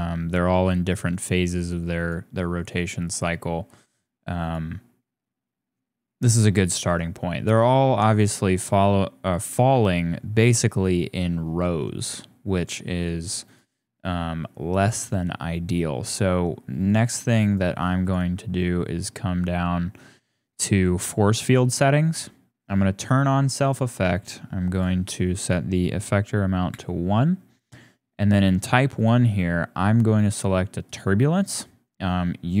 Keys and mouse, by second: 1.1 click, 1.6 click, 1.9 click, 3.1 click, 3.9 click, 4.4 click, 8.5-9.6 middle drag, 9.8 shift+click, 10.3 click, 11.5 click, 11.6 middle click, 12.1 middle click, 13.4 click, 14.7 click, 17.5 click, 18.0 click, 21.0 click, 22.9 click, 24.8-26.7 drag, 28.9-30.9 drag.